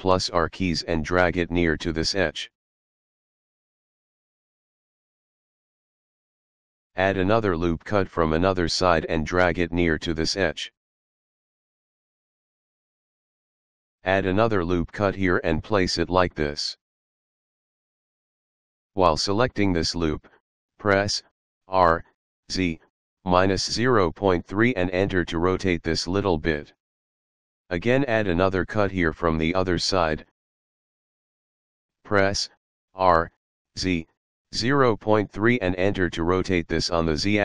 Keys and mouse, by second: 0.5 click, 5.7 click, 7.9 ctrl+r, 8.3 click, 10.8 click, 13.6 ctrl+r, 14.5 click, 18.3 click, 18.8 r, 22.1 z, 23.5 KP_Subtract, 24.3 KP_Decimal, 24.7 KP_3, 25.9 Return, 27.9 ctrl+r, 28.2 click, 31.4 click, 33.0 r, 35.0 KP_Decimal, 35.3 KP_3, 36.8 Return.